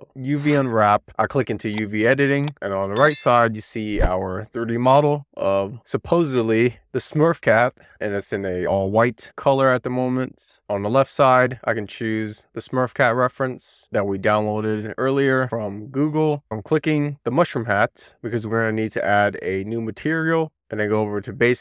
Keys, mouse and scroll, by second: 0.7 click, 1.9-2.4 scroll down 1, 2.4-3.7 scroll up 1, 3.7 middle click, 5.0 alt+middle click, 6.8 Tab, 7.1-7.5 scroll up 1, 7.5 click, 7.9 shift+middle click, 8.4-9.1 scroll up 2, 9.1 scroll up 1, 9.3 shift+middle click, 9.7-11.6 scroll down 1, 11.7 click, 13.6-14.1 scroll down 1, 14.1 scroll down 3, 14.5 shift+middle click, 16.4 n, 17.6-18.1 scroll up 1, 18.1 click, 18.9-20.5 scroll up 1.